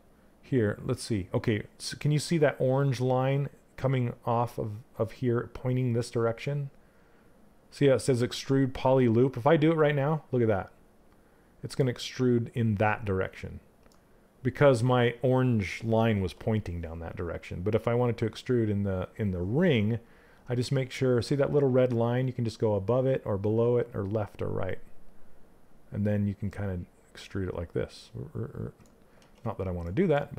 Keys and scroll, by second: 28.8 ctrl+z.